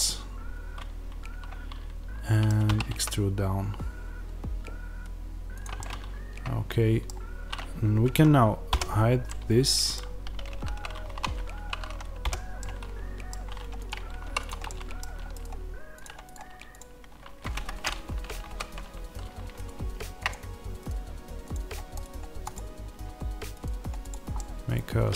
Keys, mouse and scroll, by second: 2.6 e, 5.7 middle click, 8.6-14.1 middle drag, 8.6 h, 10.4 ctrl+z, 11.0 1, 12.1 h, 14.1 3, 14.3 click, 14.5-15.9 middle drag, 15.9 right click, 17.5 Escape, 18.3 ctrl+z, 18.3-20.2 right drag, 24.2-25.1 middle drag.